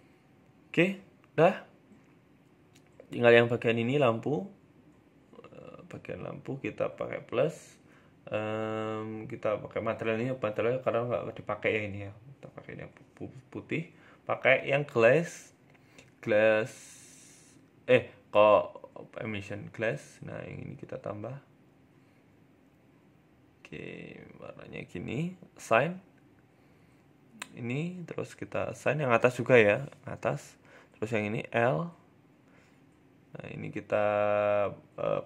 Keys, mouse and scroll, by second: 0.1 scroll down 2, 0.3 middle click, 0.9 shift+middle click, 1.0 shift+middle click, 1.2-1.5 scroll down 2, 1.4 middle click, 1.6-2.3 scroll up 3, 1.8 shift+middle click, 2.6 right click, 3.2 shift+middle click, 5.1 middle click, 5.6 right click, 6.5 click, 7.1 click, 12.5 click, 13.6 click, 16.2 click, 16.6 click, 23.0 click, 24.3 shift+middle click, 25.2 Tab, 25.6 a, 25.7 a, 26.4 l, 27.2 l, 28.3 click, 28.8 middle click, 29.0 Tab, 29.3 shift+middle click, 29.7 Tab, 30.4 a, 30.5 a, 31.6 l, 34.5 click, 35.0 click.